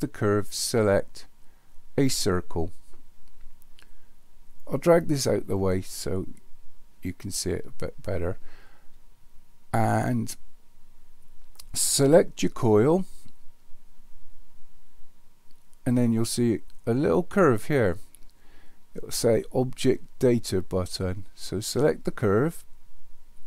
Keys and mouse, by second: 4.6-5.9 drag, 11.6 click, 22.3 click.